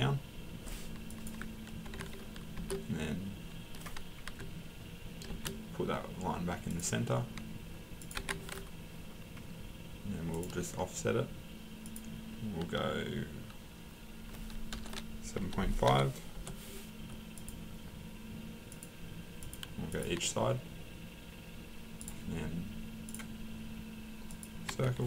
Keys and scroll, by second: 1.9 Escape, 4.3 Escape, 8.2 Escape, 14.7-16.4 typing, 24.7 Escape.